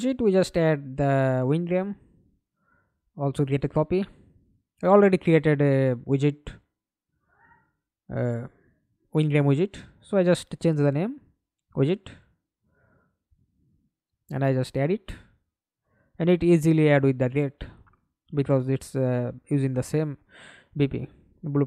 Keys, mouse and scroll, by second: 0.4-1.3 typing, 1.5 Return, 2.3 right click, 6.8 F2, 7.7-9.5 typing, 13.0 double click, 17.7-20.1 scroll down 2, 20.1-20.8 scroll down 1, 21.5 F2.